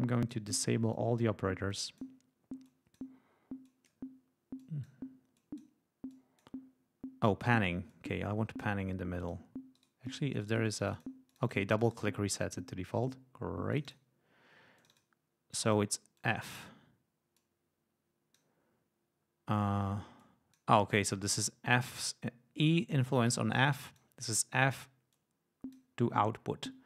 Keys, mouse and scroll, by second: 0.0 click, 0.9 click, 1.6 click, 2.6 click, 3.6 click, 4.5-5.0 drag, 5.3-5.7 drag, 6.0-6.5 drag, 7.5 right click, 7.8-9.4 drag, 9.7-11.2 right drag, 10.6 click, 11.2 click, 11.7 click, 13.7 click, 14.7 click, 15.5 click, 16.1-16.7 drag, 17.3-18.5 drag, 20.1-20.7 drag, 23.6-24.1 drag, 25.1-25.9 drag.